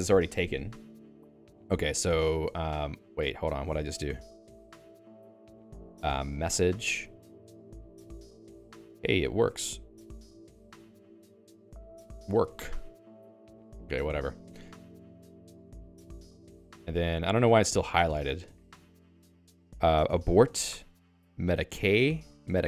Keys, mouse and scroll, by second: 7.8 space, 14.7 ctrl+s, 18.2 k.